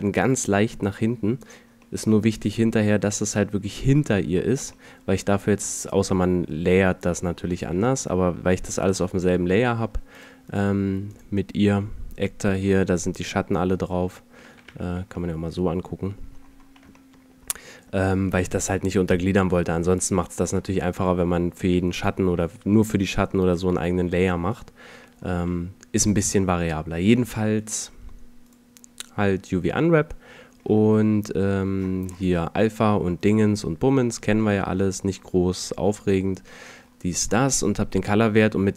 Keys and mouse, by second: 1.9-3.8 middle drag, 7.5 middle click, 8.6-9.9 middle drag, 14.8 3, 21.4-22.0 middle drag, 23.0-25.3 middle drag, 25.3 click, 25.4 a, 26.2 right click, 26.4-27.7 drag, 28.5-30.4 drag, 31.0-34.4 middle drag, 33.2-34.4 drag, 35.5-38.7 middle drag.